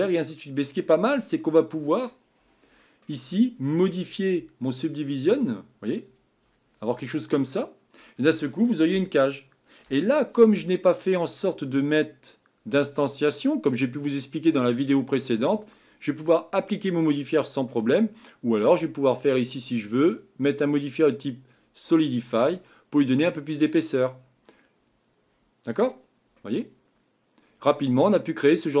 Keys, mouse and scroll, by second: 5.4-6.6 drag, 6.6-7.0 scroll down 4, 7.0-8.5 middle drag, 8.5-9.0 scroll down 2, 9.0-20.1 shift+middle drag, 21.6 click, 22.1-23.5 scroll up 5, 23.5-24.9 scroll up 1, 24.9-25.3 scroll up 1, 25.3-25.7 scroll down 3, 25.7-26.3 scroll up 4, 26.3-28.3 middle drag, 28.3-28.8 scroll down 4.